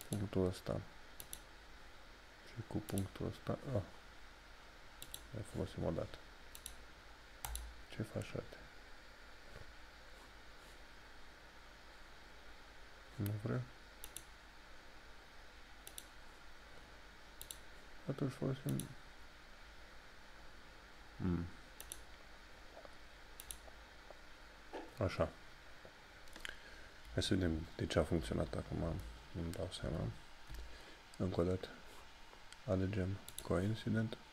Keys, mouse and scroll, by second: 0.0 click, 14.0 click, 21.8 click, 26.0 click, 33.3 click.